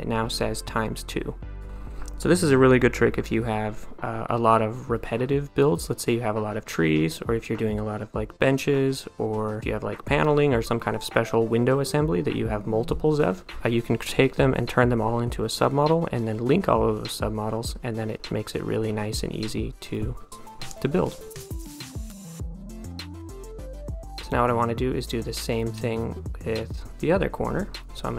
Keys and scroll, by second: 23.9 a.